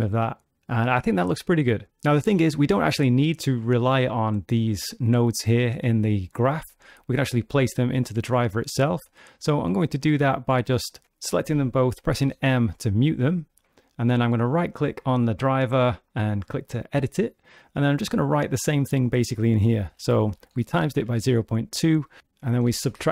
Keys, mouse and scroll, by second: 0.7 click, 10.2 click, 10.8 shift+click, 12.4 m, 14.6 right click, 22.2 BackSpace.